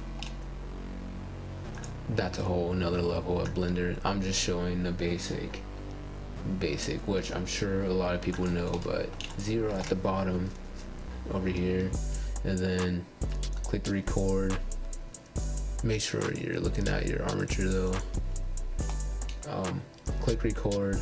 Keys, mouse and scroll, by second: 0.2-1.7 middle drag, 2.2 click, 3.2 g, 3.2-3.6 scroll down 9, 4.1 click, 5.1 click, 6.1 click, 7.0 g, 7.5 g, 8.3 KP_0, 8.7 scroll down 3, 8.9 scroll up 2, 9.3 scroll down 1, 9.4 middle click, 9.8 scroll up 1, 9.8-11.8 middle drag, 11.9-12.9 middle drag, 14.2 click, 15.3-15.9 scroll up 4, 15.9-18.0 shift+middle drag, 18.0 click, 19.3 click.